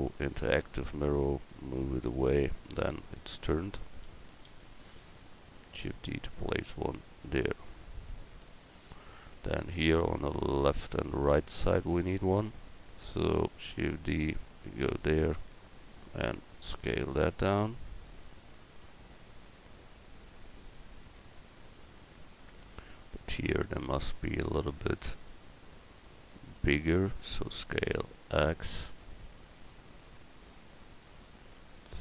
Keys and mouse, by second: 4.5 shift+d, 13.3 shift+d, 14.3-20.2 drag, 18.8 s, 27.1 s.